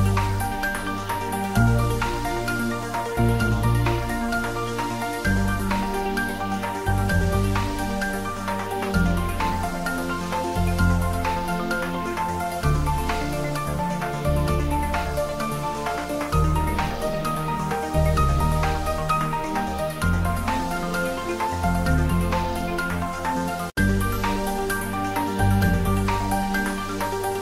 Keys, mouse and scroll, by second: 3.6-4.0 scroll up 1, 4.3-4.7 scroll down 1, 5.0 middle click, 5.9 click, 8.5 click, 9.9 click, 11.7 `, 11.8 `, 15.1 scroll up 1, 16.2 click, 17.6-19.6 drag, 22.5-22.8 typing, 24.5 click, 25.9 1, 26.6 r, 27.1 1.